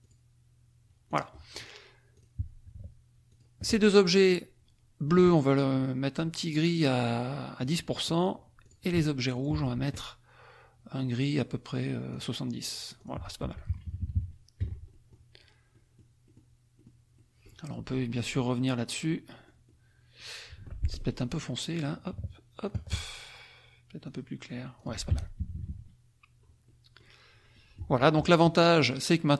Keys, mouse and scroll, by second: 0.1 click, 1.2 click, 2.1 click, 3.2 shift+click, 7.6 click, 8.6 click, 9.3 shift+click, 12.2 click, 12.9 click, 13.4 F1, 13.8 KP_Subtract, 14.8 F1, 14.8 click, 15.8 click, 16.4 click, 16.8 click, 17.1 click, 18.3 click, 18.8-20.3 drag, 20.6 F2, 20.8 click, 21.8 click, 22.7 shift+click, 24.1 click, 24.7 click, 25.1 F1, 25.4 KP_Subtract, 26.6 click, 27.5-29.3 drag.